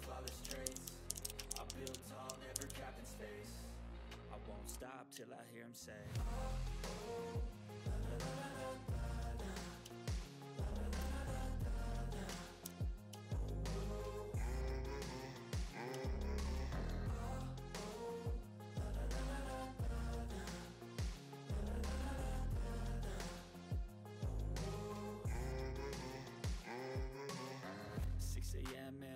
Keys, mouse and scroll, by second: 0.1-3.1 typing, 3.0 click, 5.1-5.4 ctrl+scroll up 1, 5.4-9.6 drag, 9.8-10.2 ctrl+scroll down 1, 9.8 typing, 10.3 ctrl+middle click, 10.5-10.8 scroll up 1, 10.8 click, 12.5 ctrl+g, 13.0 click, 13.1 ctrl+scroll down 1, 13.3-14.0 typing, 13.3-15.6 ctrl+middle drag, 15.6 click, 16.0 ctrl+scroll down 1, 16.3 click, 16.4 right click, 17.2 typing, 17.3 click, 19.3 click, 20.6 click, 21.1-21.8 scroll down 1, 24.1 scroll down 1, 24.1 click.